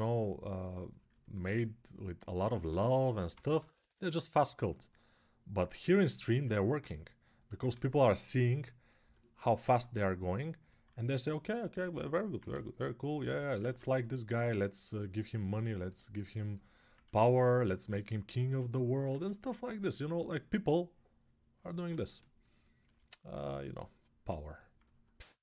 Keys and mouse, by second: 3.1 [, 3.2 [, 10.6-11.7 drag, 12.7-25.4 alt+drag, 13.4 2.